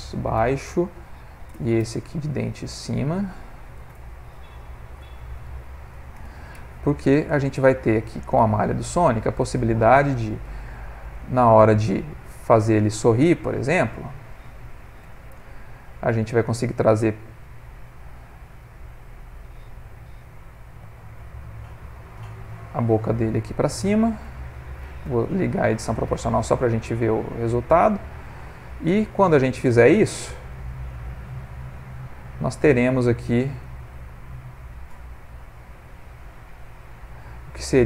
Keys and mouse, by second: 2.8 click, 3.0 click, 7.3 click, 8.8 click, 9.5 ctrl+middle click, 9.6 ctrl+middle click, 10.5 click, 11.2 click, 12.2 Tab, 13.5 click, 15.0 g, 20.7 3, 21.2 click, 21.9 shift+click, 22.7 click, 23.8 shift+click, 25.0 o, 26.1 g, 29.2 click, 30.0 shift+click, 30.8 g, 32.8 click, 33.7 shift+click, 34.1 g.